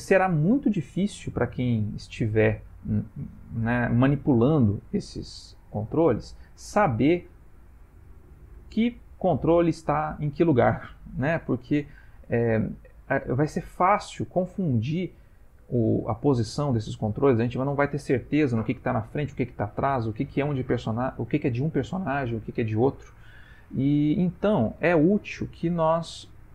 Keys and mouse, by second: 8.9 middle click, 9.6 middle click, 10.0 middle click, 10.8 middle click, 10.9 middle click, 24.3 middle click, 24.4 middle click.